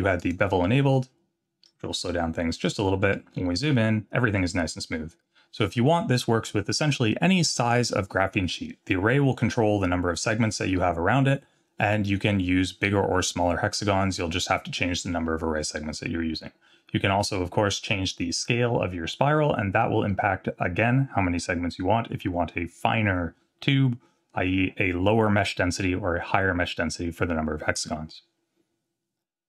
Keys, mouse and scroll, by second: 1.4 click, 2.0-2.7 scroll up 4, 2.8 shift+middle drag, 3.3 scroll up 2, 4.3 scroll down 1, 5.4 scroll down 4, 11.2-11.6 scroll down 1.